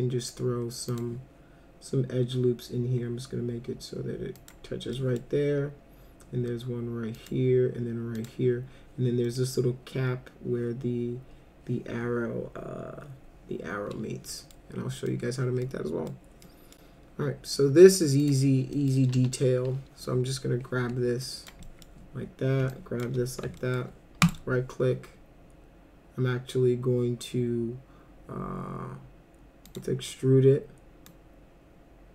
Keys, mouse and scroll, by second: 0.9 click, 4.4 click, 5.0 middle click, 7.2 click, 8.2 click, 9.3 middle click, 14.3 middle click, 15.1 middle click, 15.7 middle click, 16.5 middle click, 18.2 click, 18.7 middle click, 19.1 F4, 20.8 w, 21.2 click, 21.6 middle drag, 22.7 ctrl+click, 23.6 alt+middle click, 24.2 right click, 29.7 click, 31.1-32.1 drag.